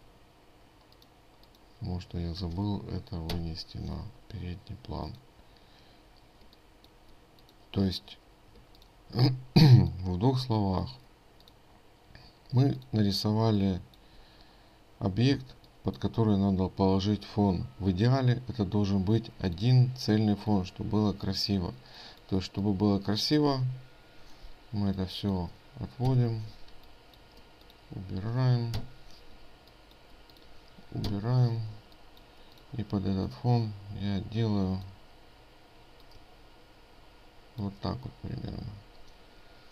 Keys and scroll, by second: 0.5 ctrl+z, 9.2 ctrl+space.